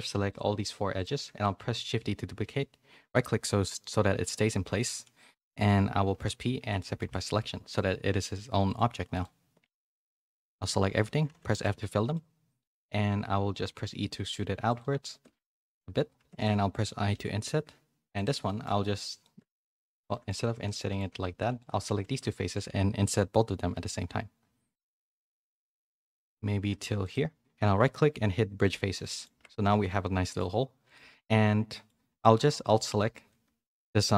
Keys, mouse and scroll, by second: 1.5 shift+d, 7.0 Tab, 8.7-9.8 drag, 9.8 a, 11.3 f, 11.6 middle click, 12.5 middle click, 16.1 3, 16.3 click, 17.1 i, 18.5 middle click, 18.8 middle click, 19.3 middle click, 19.7 ctrl+z, 20.1 shift+middle click, 20.3 z, 20.6 middle click, 21.2 3, 21.5 shift+click, 22.0 z, 23.7 u, 24.7 u, 24.9 i, 27.6-29.0 right drag, 29.3 Tab, 29.7 a, 29.8 middle click, 30.8 click, 31.0 Tab, 31.1 middle click, 32.1 3, 32.6 alt+click, 32.9-34.1 middle drag.